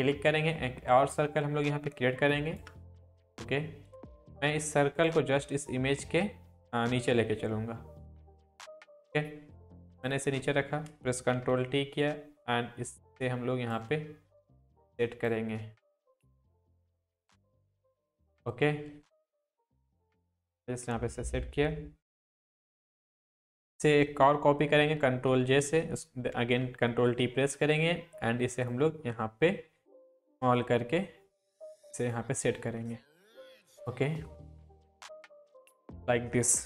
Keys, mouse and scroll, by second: 0.5-2.7 shift+drag, 11.3 ctrl+t, 12.0-13.9 drag, 19.5 Left, 20.6 Down, 21.0 Right, 25.1 ctrl+j, 26.4 ctrl+t, 27.1-29.0 drag, 32.9-33.6 alt+click, 34.5 Up, 34.7 click, 35.0 shift+click, 35.1-35.7 drag.